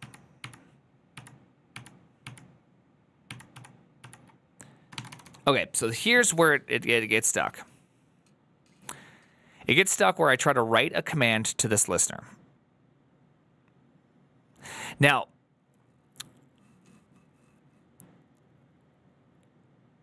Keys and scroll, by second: 0.0-0.3 typing, 4.7-5.5 typing.